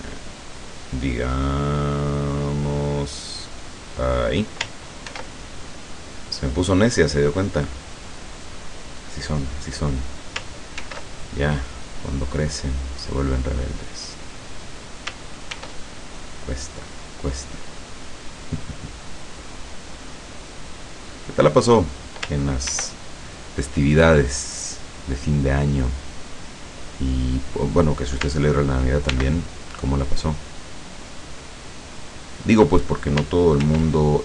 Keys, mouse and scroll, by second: 4.2 click, 5.1 ctrl+r, 6.0 click, 8.3 click, 10.9 ctrl+r, 11.9 click, 14.2 click, 15.6 ctrl+r, 17.1 click, 21.5 click, 22.7 ctrl+r, 23.6 click, 27.6 click, 29.1 ctrl+r, 30.3 click, 32.5 click, 33.6 ctrl+r.